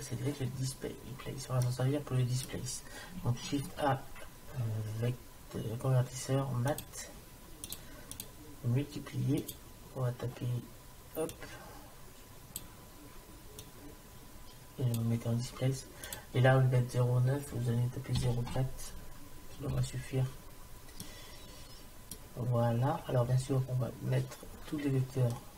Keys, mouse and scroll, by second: 1.3-2.3 middle drag, 3.8 shift+a, 8.2 click, 11.4-13.1 drag, 13.6-15.6 drag, 16.1-18.1 drag, 21.0-22.9 middle drag, 24.1 middle click.